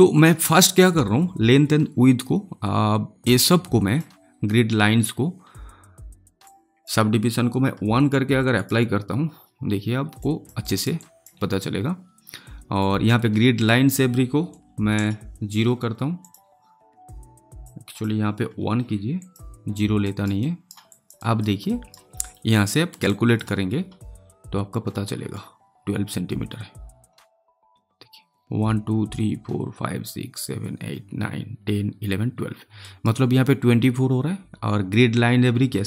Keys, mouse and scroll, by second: 6.4-8.5 drag, 10.1 alt+click, 10.5 alt+right click, 10.9 alt+click, 13.0 click, 16.1-19.1 drag, 20.0 alt+right click, 20.8 alt+click, 21.1 alt+right click, 22.2 alt+middle click, 23.0 alt+right click, 32.8 alt+right click.